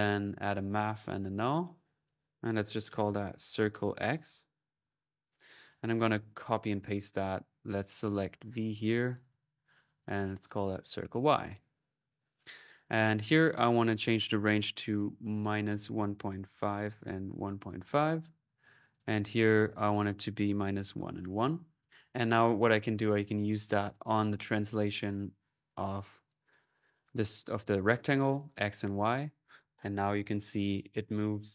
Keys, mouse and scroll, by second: 1.2 typing, 1.4-3.3 alt+drag, 5.0-6.0 right drag, 6.2 ctrl+v, 6.7 ctrl+click, 7.9-9.2 ctrl+drag, 9.8 click, 11.8-13.1 drag, 13.3 click, 13.9-15.6 drag, 18.7 click, 19.4 click, 21.6 click, 21.8 click, 22.6 click, 23.5-24.3 typing, 23.8 click, 24.9-26.3 drag, 27.9 click, 28.4 middle click, 28.5-29.3 typing, 28.8 click.